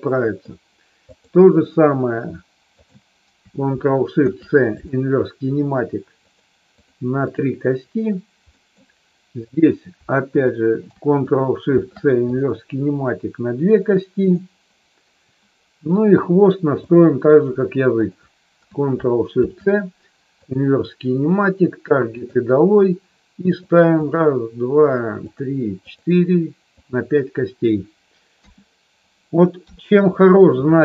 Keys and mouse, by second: 4.1 ctrl+shift+c, 8.5 middle click, 9.5 click, 10.3 shift+click, 13.8 click, 14.2 click, 16.7 click, 18.0 shift+click, 19.3 ctrl+shift+c, 22.2 click, 25.8 click, 26.8 click, 28.3 KP_1, 30.7 shift+middle click.